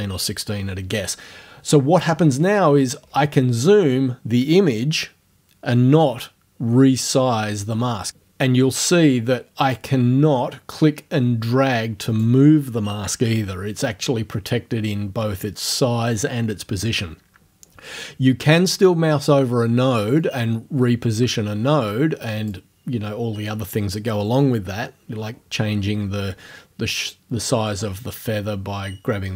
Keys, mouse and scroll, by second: 3.1-3.8 scroll up 3, 5.8-6.4 scroll down 1, 9.8-12.4 drag, 20.2-22.7 drag, 27.7-29.3 drag.